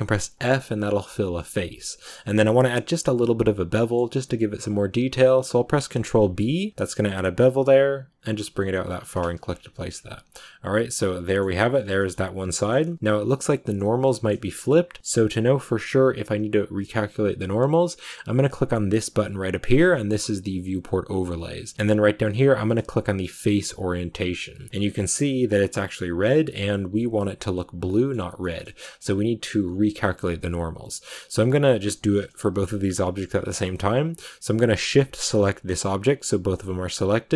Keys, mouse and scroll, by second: 0.2 f, 3.6-5.8 middle drag, 5.8 ctrl+b, 9.2 Tab, 9.2 scroll up 1, 9.3-9.8 scroll down 10, 10.2-12.3 middle drag, 12.3-12.7 scroll up 2, 12.4 shift+middle click, 12.7 middle click, 13.2-14.0 scroll up 1, 14.0-23.4 shift+middle drag, 23.4-24.9 drag, 24.9-27.8 scroll down 2, 27.8-37.3 middle drag.